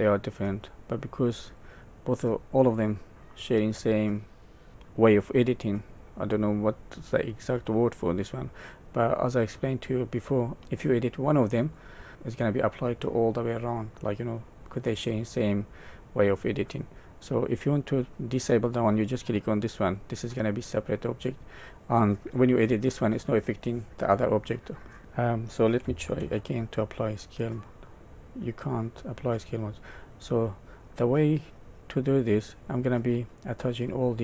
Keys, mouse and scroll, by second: 2.2 middle click, 3.0-4.7 scroll up 1, 4.7 click, 10.2-10.6 scroll up 1, 10.6 middle click, 12.0 scroll up 1, 13.9 middle click, 18.3 middle click, 24.2 middle click, 26.2 ctrl+a, 30.1 middle click.